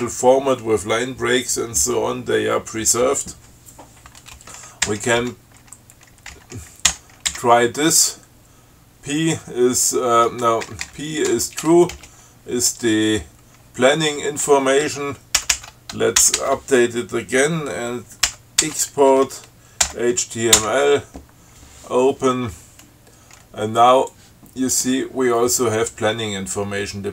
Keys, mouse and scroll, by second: 5.1 p, 6.6 n, 7.1 i, 7.6 l, 10.9 BackSpace, 11.9 t, 12.2 space, 15.6 ctrl+c, 16.6 ctrl+s, 18.5 ctrl+c, 18.9 ctrl+e, 20.1 h, 20.9 o, 24.4-25.2 drag.